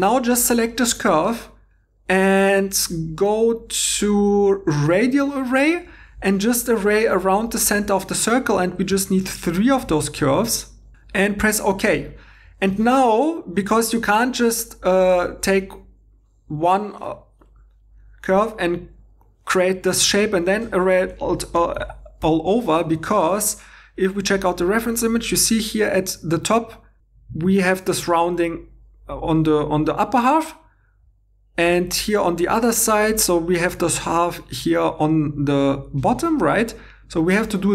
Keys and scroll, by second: 8.9 3, 14.5 1, 21.8 super+z, 22.3 super+z, 23.0 alt+Tab.